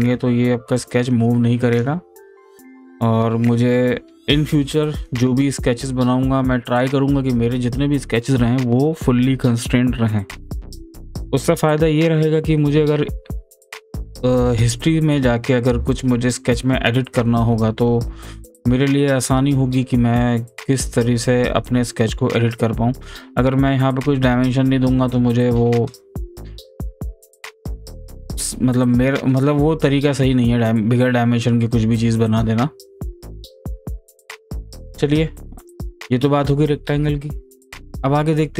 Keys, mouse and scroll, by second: 0.8-2.5 drag, 33.4 click, 34.0-38.1 drag.